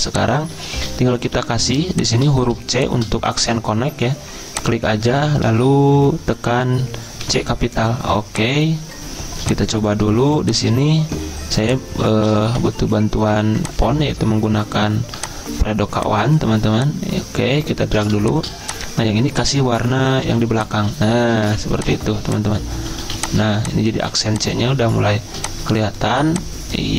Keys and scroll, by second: 0.0-1.3 typing, 5.5 Caps_Lock, 7.2 c, 12.0-13.2 typing, 23.3-24.0 typing.